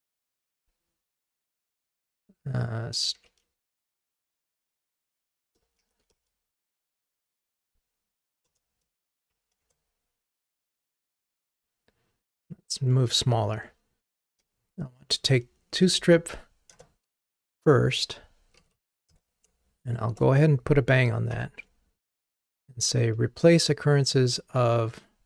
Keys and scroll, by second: 8.7 Return, 12.6 super+z, 13.6 super+z, 16.7 Return.